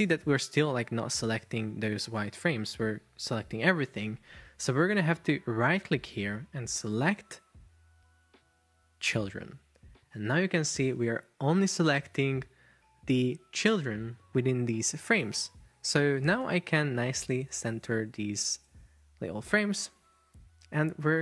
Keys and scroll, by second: 2.1 super+z.